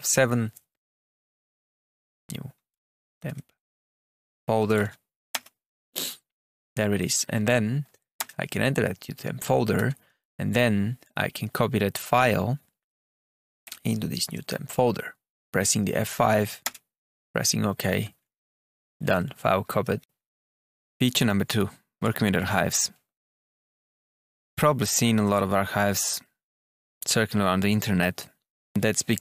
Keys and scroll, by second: 0.8-5.1 typing, 5.2 Return, 6.3 Up, 6.9 Down, 8.1 Return, 9.6 Tab, 13.5 F5, 16.5 Return, 17.8 Tab, 18.1 Down, 19.7 Up, 23.6 Tab.